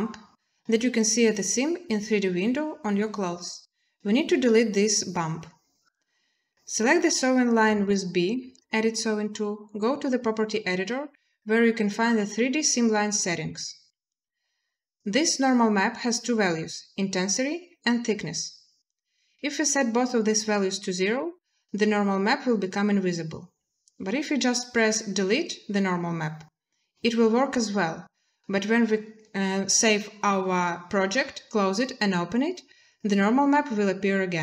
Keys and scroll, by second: 6.9 b.